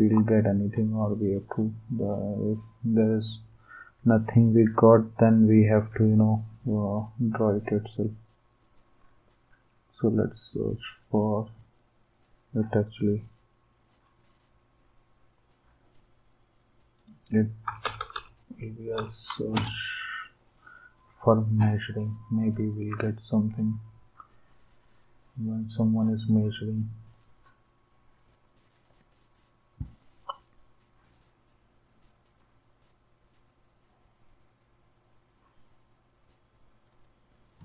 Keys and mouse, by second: 0.1-1.1 drag, 17.6-19.0 typing, 19.5 Return.